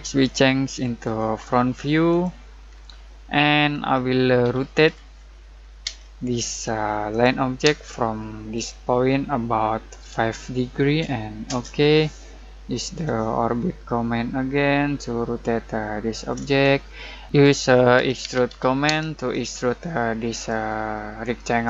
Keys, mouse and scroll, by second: 1.0 click, 2.7-3.0 scroll down 1, 3.0 middle click, 3.7 scroll up 1, 4.4-5.8 typing, 6.5 click, 7.6 space, 8.5 click, 10.1 5, 11.4 Return, 13.3-16.6 shift+middle drag, 16.6-17.2 scroll up 1, 17.7-19.0 typing, 20.3 click.